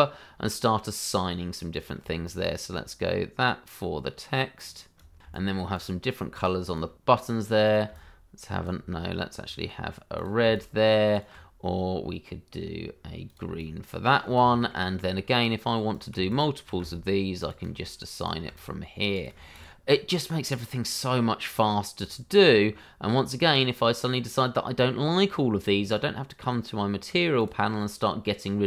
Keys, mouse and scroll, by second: 0.2-1.3 scroll up 1, 1.7 click, 2.2 alt+right click, 4.5 click, 5.3 right click, 5.7 click, 6.3 click, 7.0 middle click, 7.7 click, 8.0 right click, 9.3-9.7 scroll down 1, 10.1 click, 10.5 alt+right click, 12.6 scroll up 1, 13.2 click, 13.6 right click, 14.5 shift+middle click, 15.9 click, 16.8 alt+right click, 18.1 click, 18.6 right click, 19.9-20.8 scroll down 1, 22.0 shift+middle click, 22.6-23.4 scroll down 1, 24.1 middle click, 27.3 click.